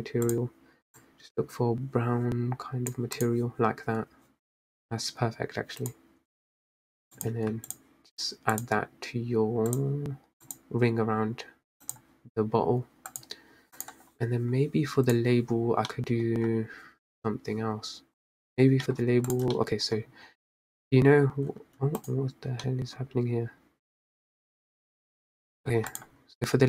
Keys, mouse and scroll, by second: 3.5 click, 6.4 click, 7.4-9.0 drag, 10.0 click, 10.9 click, 12.2 click, 13.7 click, 14.2 click, 15.5 click, 16.2-16.7 middle drag, 16.7-17.3 scroll down 2, 19.2-19.6 scroll down 2, 19.6 drag, 19.9 middle click, 20.1-20.8 scroll up 1, 21.8 middle drag, 21.8 scroll up 4, 22.4 click, 22.9 scroll up 1, 23.1-23.4 middle drag, 23.4-24.0 scroll down 1, 25.8 middle click, 25.9-26.5 scroll down 7, 26.5 click.